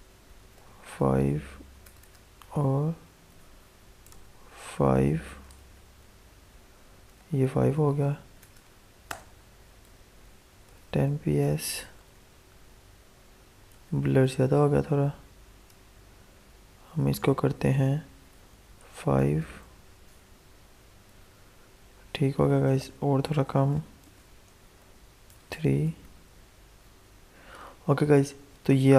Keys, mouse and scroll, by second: 0.3 alt+Tab, 1.7 click, 3.2-4.8 typing, 5.0 ctrl+s, 5.5 alt+Tab, 6.3 F5, 7.1 alt+Tab, 8.3 click, 9.0-11.3 typing, 11.9 alt+Tab, 12.7 F5, 13.7 alt+Tab, 15.6-18.4 drag, 18.4 5, 19.1 ctrl+s, 19.8 Tab, 21.0 F5, 22.6 alt+Tab, 23.9 BackSpace, 24.6 3, 25.2 ctrl+s, 25.8 alt+Tab, 26.7 F5.